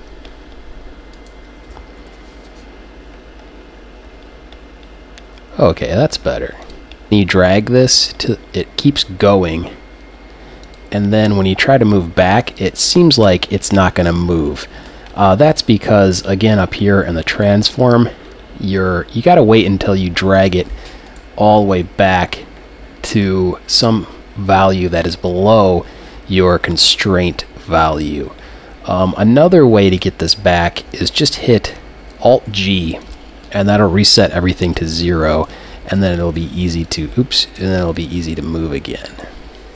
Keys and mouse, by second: 1.2-3.0 right drag, 2.1 g, 6.7-7.1 drag, 7.1 g, 10.8-13.0 drag, 11.5 g, 15.6-19.2 drag, 20.4-23.0 right drag, 21.5 g, 30.0-32.0 drag, 32.5 alt+g, 33.1-35.4 drag, 35.4 right click, 36.0 g, 36.9 click, 37.6-39.2 super+drag, 38.1 z.